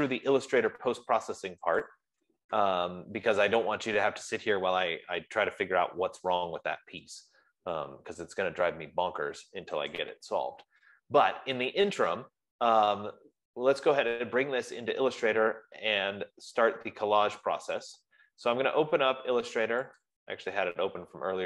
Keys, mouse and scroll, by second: 2.5-6.3 drag, 10.5-15.4 drag, 20.5 click.